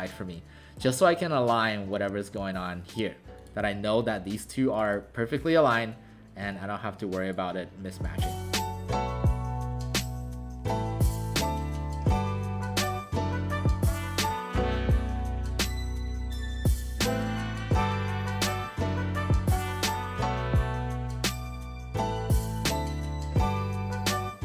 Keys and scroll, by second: 8.6-9.4 typing, 15.9 ctrl+alt+shift+c, 17.2-18.5 typing, 20.4 w, 20.6 space.